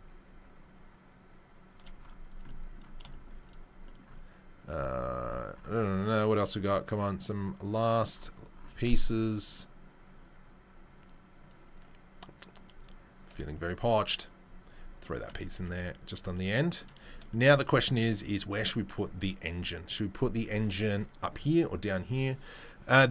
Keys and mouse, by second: 2.2-4.7 right drag, 4.7-13.7 middle drag, 13.7-14.7 right drag, 14.7-18.0 shift+middle drag, 18.0 right click, 18.1-23.1 middle drag.